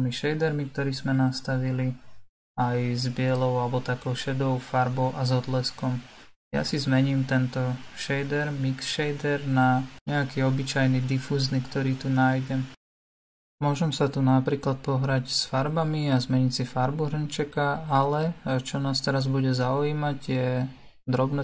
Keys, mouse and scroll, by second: 9.4-12.6 drag, 14.1 click, 20.8-21.4 drag.